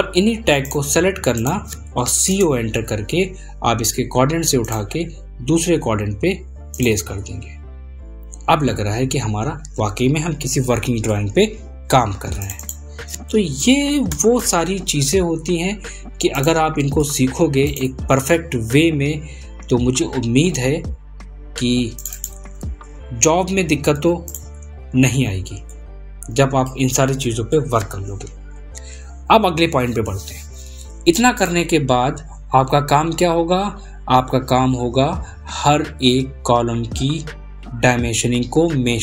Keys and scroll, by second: 21.1 ctrl+a.